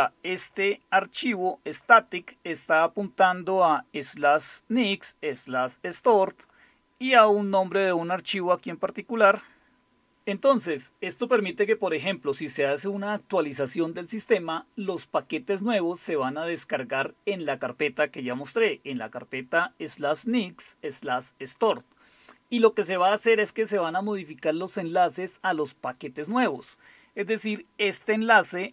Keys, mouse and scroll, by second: 0.3-1.8 drag, 3.1-6.5 drag, 7.4-9.7 drag, 28.6-28.7 drag.